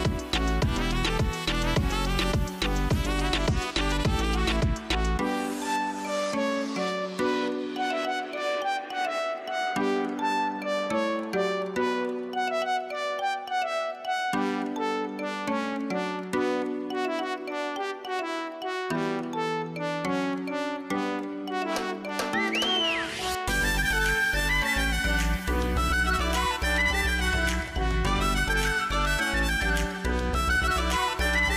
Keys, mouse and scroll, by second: 3.7 click, 5.3-5.9 scroll up 5, 6.2 scroll down 3, 7.0 click, 8.6 scroll up 2, 12.9 scroll down 1, 14.9-16.1 drag, 23.2 scroll, 26.4 scroll, 28.5-29.1 scroll, 30.3 scroll down 1, 30.8 scroll, 30.9 scroll down 1.